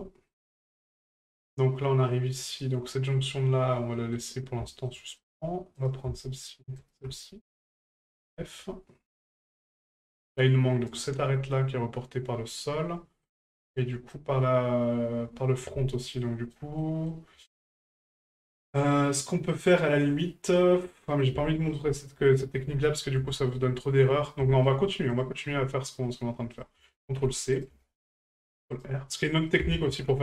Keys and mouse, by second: 0.3-1.1 middle drag, 3.9 middle drag, 4.7 shift+middle drag, 5.0 middle drag, 5.8 right click, 6.8 shift+right click, 8.3 shift+middle drag, 10.9 right click, 12.6 middle click, 13.7-14.1 shift+middle drag, 16.2-16.5 shift+middle drag, 16.8 middle drag, 17.5-17.9 shift+middle drag, 20.6-21.2 middle drag, 21.5 shift+middle drag, 21.9 middle drag, 23.3 shift+middle drag, 24.5 shift+middle drag, 25.1 right click, 26.5-27.7 ctrl+drag, 29.5 ctrl+click.